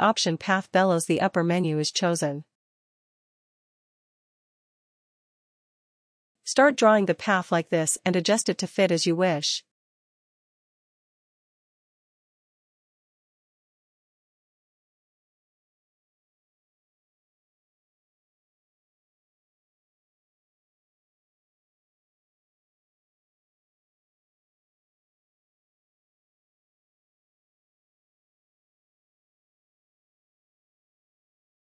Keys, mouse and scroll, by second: 3.9 click, 10.0 click, 11.4 click, 16.0 click, 19.0 ctrl+z, 19.0 click, 19.6 ctrl+z, 26.1 click.